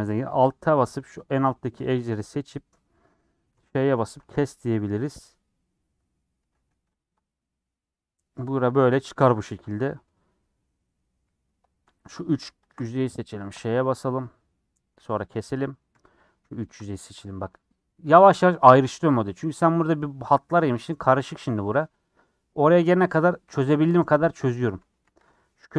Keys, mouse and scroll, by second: 0.4 alt+z, 2.5 click, 3.5 ;, 4.2 alt+z, 4.4-6.3 middle drag, 6.3 a, 7.0 u, 7.9-10.0 middle drag, 10.0 scroll down 1, 10.4-12.0 middle drag, 12.1 click, 13.5 ;, 13.9 middle click, 14.8 scroll down 1, 15.2 middle click, 15.9 3, 16.1 click, 17.3 ;, 18.2-20.4 middle drag, 20.4-20.8 scroll up 3, 20.9 middle click, 21.7 scroll down 3, 22.0-25.2 middle drag, 25.2 click, 25.4-25.7 middle drag.